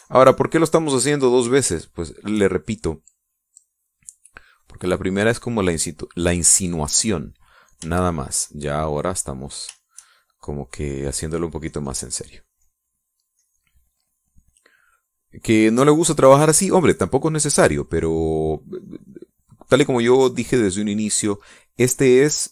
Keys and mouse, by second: 0.3-2.5 shift+drag, 2.6 shift+click, 4.5-6.1 drag, 6.3 click, 6.8 click, 9.2 shift+click, 9.9 shift+click, 10.8-22.5 shift+drag.